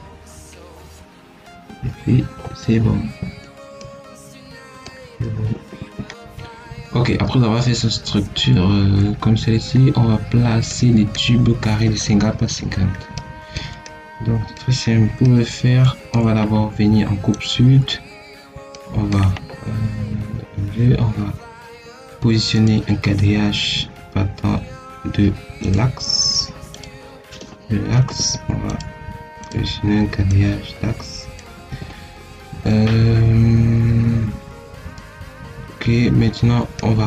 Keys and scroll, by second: 2.5 Escape, 5.4 Escape, 27.8 Escape, 31.4 Escape.